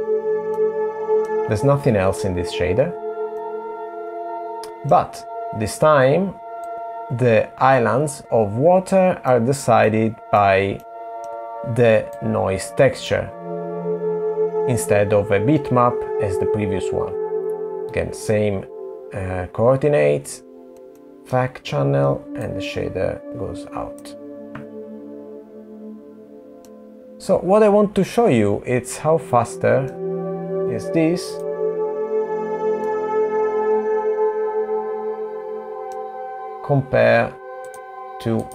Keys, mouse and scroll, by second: 0.5 middle click, 3.4 middle click, 6.7 click, 6.7 middle click, 9.9 middle click, 10.9 middle click, 12.3 click, 17.6 middle click, 20.7 click, 21.1 middle click, 22.6 click, 26.8 middle click, 33.2 middle click, 38.0 click.